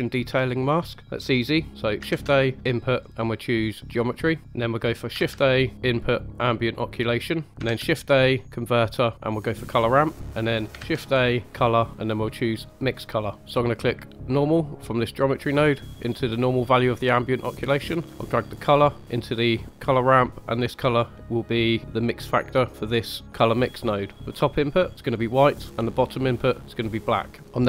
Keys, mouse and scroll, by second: 2.0 shift+a, 5.1 shift+a, 7.7 shift+a, 9.8 click, 10.7 shift+a, 13.4 click, 13.4 scroll up 2, 14.2-16.5 drag, 18.1-19.3 drag, 20.5-23.2 drag, 24.2 click, 26.1 click.